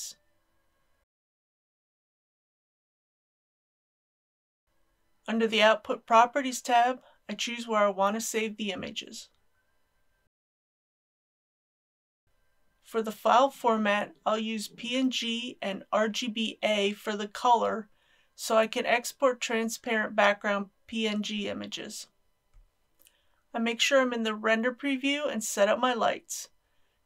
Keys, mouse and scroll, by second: 7.8-8.3 scroll down 1, 12.2 click, 22.8 n, 23.7 click.